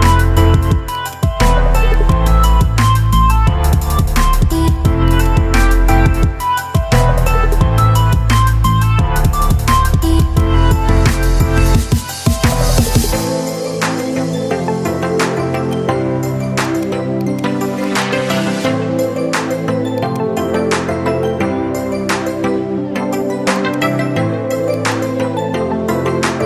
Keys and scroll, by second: 11.1 Escape, 19.2 Delete, 22.1 ctrl+z, 24.3 Delete, 26.2 ctrl+z.